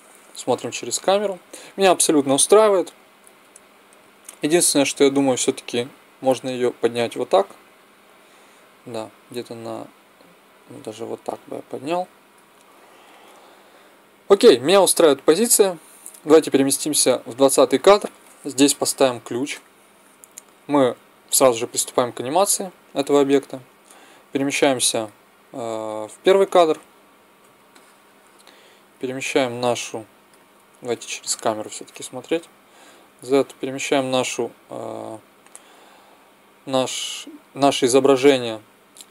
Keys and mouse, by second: 0.4 KP_0, 6.1-7.9 drag, 16.2-18.2 drag, 18.7 i, 23.5-25.4 drag, 29.2 middle click, 31.4 KP_0, 32.8 z, 33.9 click.